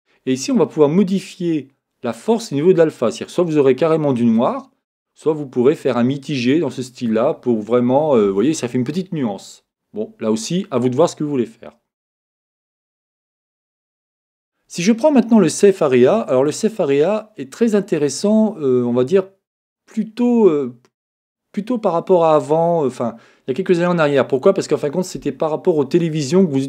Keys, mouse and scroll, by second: 12.7-14.6 drag, 13.3-15.4 middle drag, 16.4-18.3 drag.